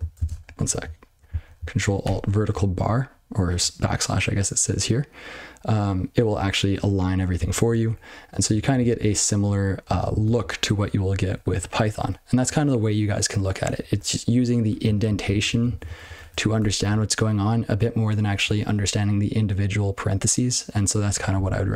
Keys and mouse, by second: 0.1 ctrl+space, 0.3 ctrl+a, 0.6 ctrl+p, 1.2 ctrl+n, 2.0 ctrl+alt+\, 8.2 ctrl+p, 8.6 click, 8.8-9.4 ctrl+p, 9.8 ctrl+n, 10.0 ctrl+n, 11.0 ctrl+p, 11.2 ctrl+p, 11.4 ctrl+p, 11.5 ctrl+p, 11.7 ctrl+n, 11.9 ctrl+p, 15.0 ctrl+n, 15.2 ctrl+n, 15.4 ctrl+n, 15.6 ctrl+n, 15.8 ctrl+n, 16.0 ctrl+n, 16.1 ctrl+a, 16.5 Tab.